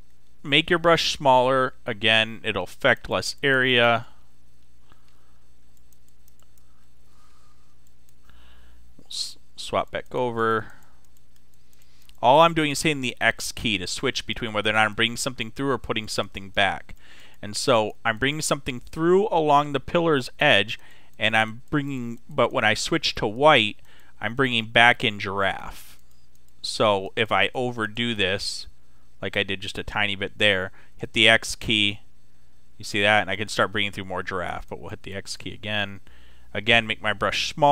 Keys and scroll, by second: 1.1 [, 8.9 x, 30.8 x, 33.8 x, 36.4 [.